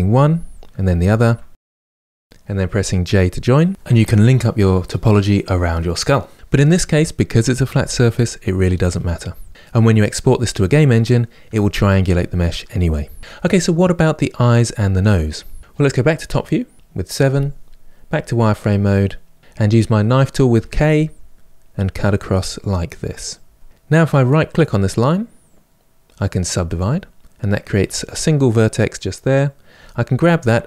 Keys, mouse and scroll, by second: 0.7 shift+click, 1.6 middle click, 2.0 click, 2.1 middle click, 2.8 shift+click, 2.9 middle click, 3.6 j, 4.0-5.3 middle drag, 5.3 click, 5.6 middle click, 9.0 middle click, 13.6-15.6 middle drag, 16.7 KP_7, 17.8 click, 20.3 k, 25.2-27.5 right drag, 27.5 click, 29.5 g.